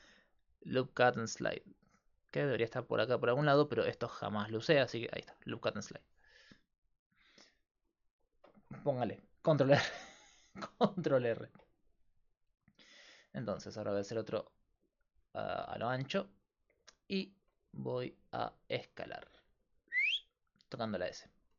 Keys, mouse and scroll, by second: 5.9-7.8 drag, 7.8-10.6 middle drag, 13.8 ctrl+r, 16.3-19.2 right drag, 19.0 s, 19.2 click.